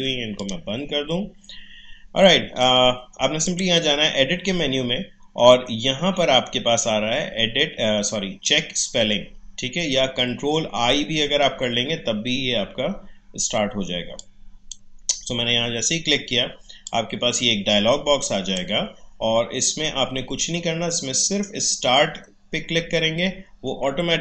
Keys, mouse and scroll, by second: 3.4 click, 14.2-16.8 drag, 16.8-21.0 drag.